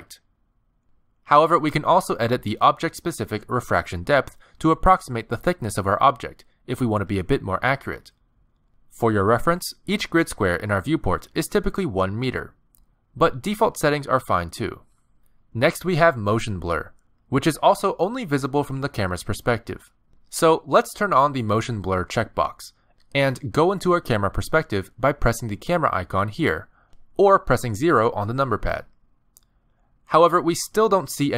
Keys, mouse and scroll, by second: 2.1 middle click, 3.3 g, 5.2 middle click, 7.7 middle click, 8.3 shift+middle click, 8.5 scroll up 2, 9.4 click, 11.0 middle click, 11.8 g, 13.0 click, 13.9 middle click, 14.9-15.3 scroll up 7, 16.3 click, 16.6 click, 17.2 click, 19.3-19.9 scroll down 5, 20.8 click, 22.9 click, 25.1 click, 27.8 KP_0, 28.5 KP_0.